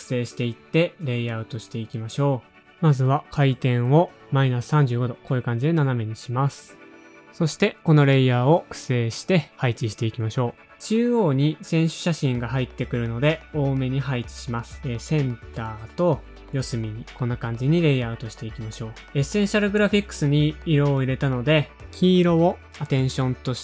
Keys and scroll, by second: 3.7-5.3 typing, 7.4-9.1 typing, 9.5 super+d, 9.9 shift+super+-, 10.0 super+d, 11.0 super+d, 11.6 super+[, 11.6 shift+Left, 11.7 shift+Left, 11.8 super+d, 11.9 shift+Right, 11.9 shift+Down, 12.0 shift+Down, 12.2 shift+Right, 12.4 shift+Up, 12.7 shift+Right, 12.8 shift+Down, 12.9 alt+/, 13.2 super+Up, 13.3 s, 13.4 shift+super++, 13.5 shift+super++, 14.4 shift+super+Down, 14.4 super+d, 15.1 super+[, 15.2 super+], 15.4 super+Up, 15.4 shift+Right, 15.4 shift+Down, 15.4 shift+Right, 15.7 shift+Right, 15.8 shift+Right, 15.8 super+Up, 15.9 shift+Down, 16.2 super+Up, 16.4 super+d, 16.5 super+], 16.5 super+[, 17.1 shift+super+a, 17.1 space, 17.3 super+Down, 17.4 super+Down, 17.5 0, 17.6 space, 17.8 space, 17.9 shift+Page_Down, 17.9 shift+Page_Down, 18.2 Page_Up, 18.6 super+Up, 18.8 super+Up, 18.8 super+Down.